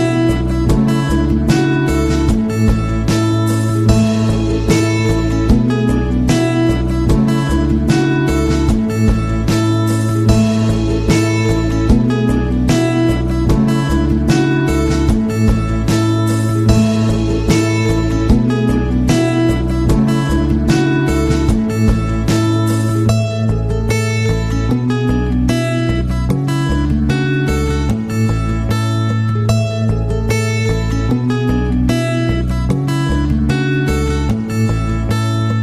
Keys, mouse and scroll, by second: 1.0 click, 6.3 click, 8.8 click, 15.8 click, 19.3 ctrl+scroll down 2, 20.8 ctrl+scroll up 2, 21.6-22.0 ctrl+scroll down 4, 23.0 ctrl+scroll up 2, 25.9 ctrl+click, 28.7-29.9 drag, 32.0 right click, 33.2 click, 34.5 click.